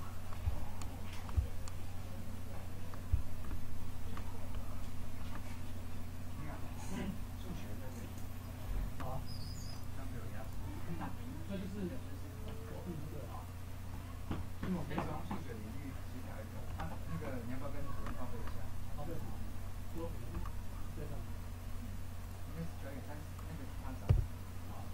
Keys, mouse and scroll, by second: 5.9-6.3 drag, 6.4-6.9 drag, 13.1-14.9 drag, 18.7 KP_0, 20.5 KP_0.